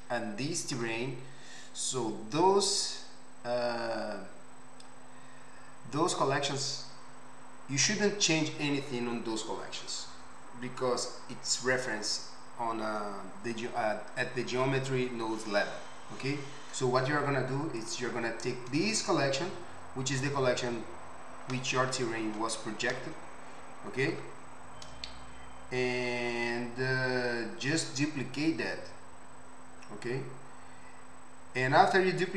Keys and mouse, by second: 17.8 click, 17.9-32.3 middle drag.